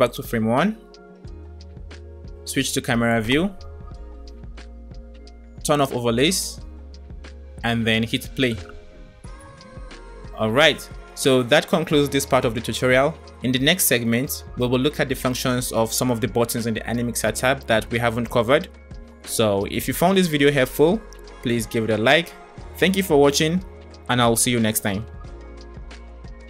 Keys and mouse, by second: 0.2 click, 1.4 click, 2.8 KP_0, 5.8 click, 8.4 space, 21.7 space, 24.8-26.0 drag.